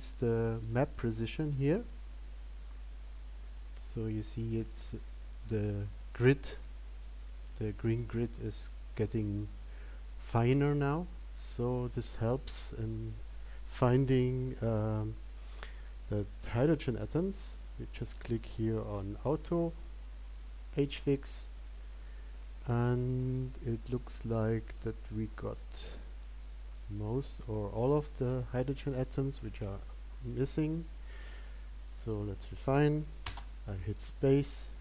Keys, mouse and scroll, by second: 31.6 click, 33.5 click.